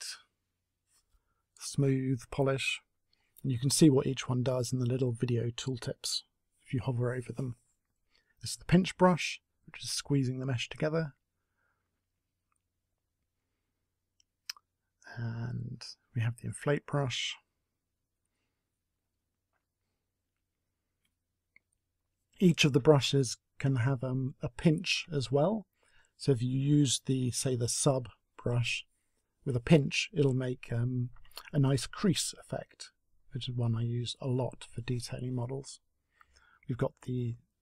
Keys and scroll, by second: 11.0 a.